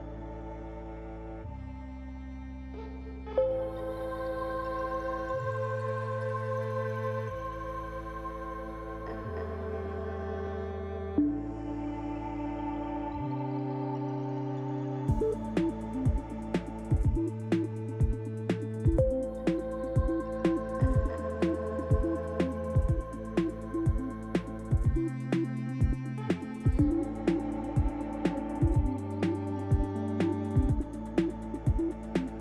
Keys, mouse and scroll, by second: 10.8 shift+click, 12.5 ctrl+l, 14.4 click, 18.1 click, 19.8 click, 21.0 shift+click, 21.1 shift+click, 22.4 ctrl+l, 25.0 click, 27.2 KP_Decimal, 31.3 click.